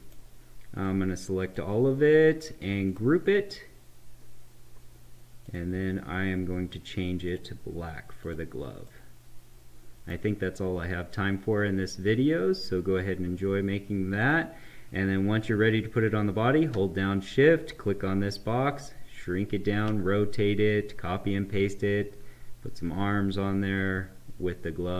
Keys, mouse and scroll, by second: 0.8-2.8 drag, 5.3 click, 8.8-12.5 right drag, 14.1 click, 17.6-22.3 shift+drag.